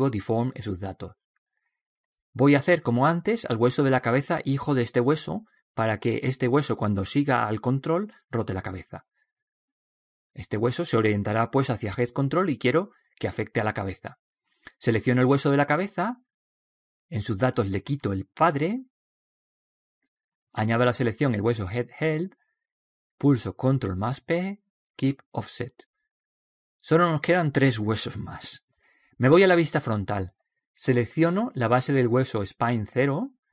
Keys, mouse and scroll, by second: 15.3 right click, 17.0 click, 21.4 right click, 24.4 ctrl+p, 28.4-32.0 middle drag, 31.4 KP_1, 32.8 right click, 33.3-33.5 middle drag.